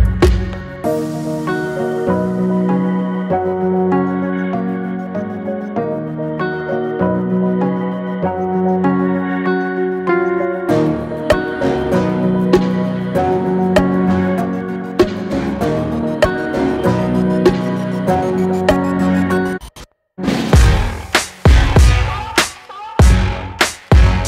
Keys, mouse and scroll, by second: 2.4-4.4 middle drag, 4.6-5.8 shift+middle drag, 5.8 click, 6.9 click, 8.1 Tab, 8.4 click, 8.6 Tab, 11.0 alt+z, 12.1 click, 13.0 alt+click, 13.5-14.8 middle drag, 14.8 alt+shift+click, 15.3-17.2 middle drag, 17.4 ctrl+b, 20.0-21.3 middle drag, 21.3 click, 22.2 click, 22.4 click, 22.8 click, 23.5 x, 24.1 click.